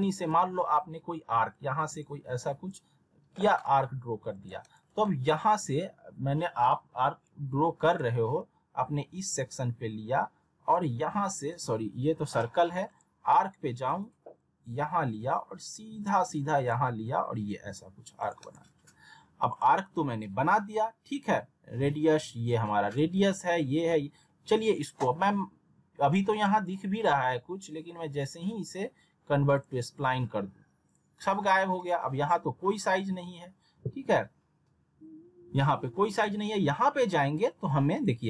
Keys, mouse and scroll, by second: 0.0-0.6 scroll down 2, 0.2 alt+w, 2.0-2.9 drag, 4.6 right click, 7.9 click, 11.0-11.6 shift+click, 18.4 right click, 19.5 click, 22.5-23.1 click, 23.1 ctrl+z, 26.3 right click, 29.6 click, 36.1 click.